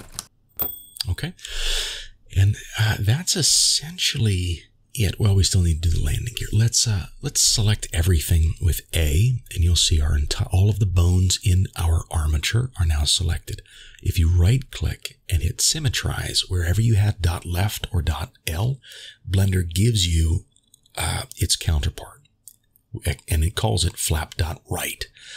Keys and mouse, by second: 4.6 a, 6.8-7.9 shift+middle drag, 13.4-15.2 drag.